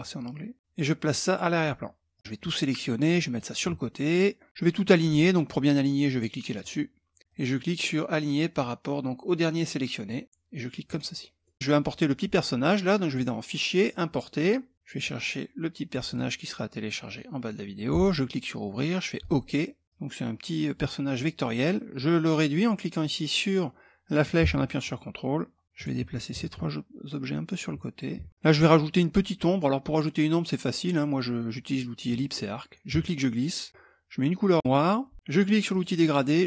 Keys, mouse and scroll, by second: 0.3 click, 1.1-4.5 drag, 6.1 click, 7.2-10.1 drag, 10.4 click, 11.0 middle click, 12.6 click, 13.4 click, 14.7 click, 15.6 click, 17.5 click, 18.8 click, 19.8-21.1 drag, 22.6-25.4 drag, 25.9-27.2 ctrl+drag, 27.7 ctrl+click, 31.6 click, 32.4-33.6 ctrl+drag, 34.4 click, 35.3 click.